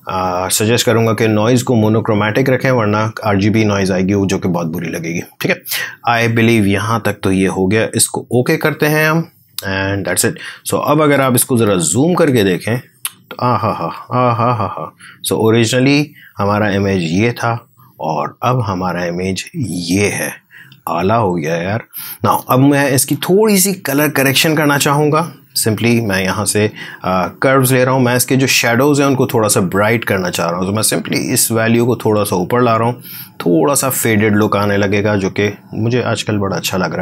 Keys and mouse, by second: 2.4 click, 8.0 click, 11.0 click, 11.6 ctrl+1, 12.2 space, 12.4 click, 12.8 space, 14.5 click, 15.6 space, 15.8 click, 16.2 space, 16.3 space, 18.2 click, 19.2 space, 19.5 click, 19.7 space, 21.4 click, 21.5 space.